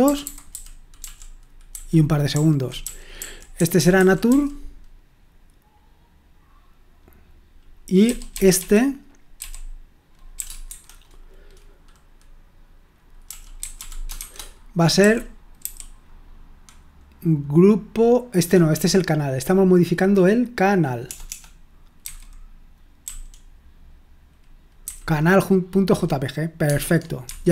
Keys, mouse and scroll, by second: 0.0-4.2 typing, 8.0-10.6 typing, 13.0-15.6 typing, 21.0-22.0 typing, 23.0 typing, 24.8 n, 26.6 Tab, 27.2 Escape.